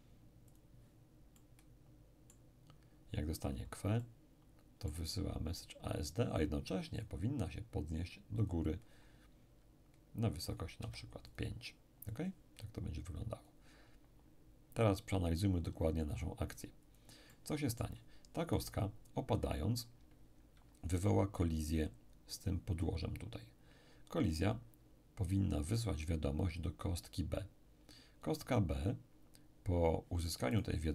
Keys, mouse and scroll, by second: 0.5-3.3 drag, 1.3-3.3 middle drag, 3.5 click, 4.0-5.9 middle drag, 7.0 click, 8.4 click, 10.5-14.4 drag, 10.8 5, 16.2-19.6 drag, 17.3-19.6 middle drag, 18.5 right click, 25.9 click, 30.5 right click.